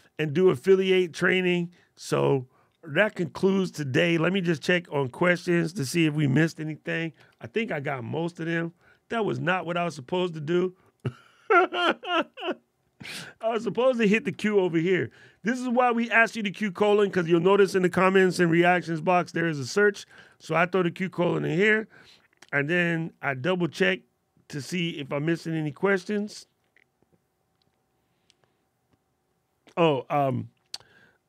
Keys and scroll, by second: 6.2 shift+;, 14.2 shift+;, 18.3 alt+super+8, 19.9 alt+super+8.